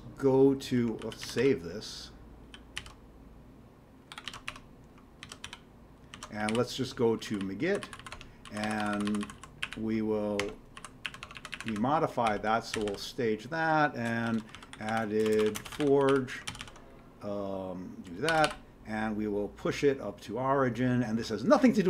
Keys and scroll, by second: 1.0 ctrl+g, 1.2 x, 1.4 ctrl+s, 2.5 ctrl+g, 2.8 ctrl+x, 4.1 o, 4.2 ctrl+x, 4.5 1, 5.2 ctrl+x, 5.4 ctrl+s, 6.1 ctrl+x, 6.5 g, 7.3 Down, 7.4 Down, 7.8 Down, 8.0 Down, 8.1 Tab, 8.6 Down, 8.8 Down, 8.9 Down, 9.6 Up, 10.4 Tab, 10.8 Down, 11.1 Up, 11.2 Tab, 11.4 Up, 11.5 Up, 11.7 Up, 12.0-18.9 typing.